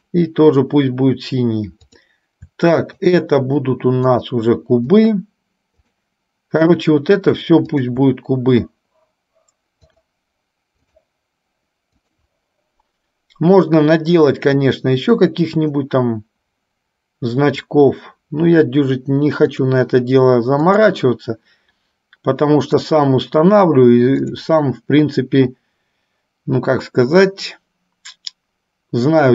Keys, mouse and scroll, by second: 0.2 click, 2.0 click, 3.1 shift+click, 4.3 shift+click, 5.2 shift+click, 6.0 shift+click, 7.0 shift+click, 8.0 shift+click, 10.0-11.2 drag, 12.2 click, 14.6-17.8 drag, 19.6 click, 20.8-23.2 drag, 24.5-29.3 drag.